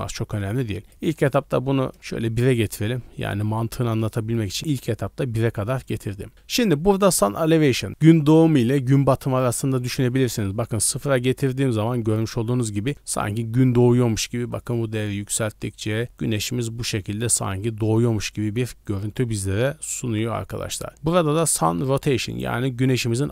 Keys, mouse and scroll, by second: 0.8-1.9 drag, 4.0 middle click, 5.6 middle click, 9.4 click, 10.9 scroll down 3, 11.1-11.8 middle drag, 11.9 middle click, 14.5-17.9 drag, 18.9 middle click, 19.2 scroll up 1, 20.1 click, 22.4-23.3 drag.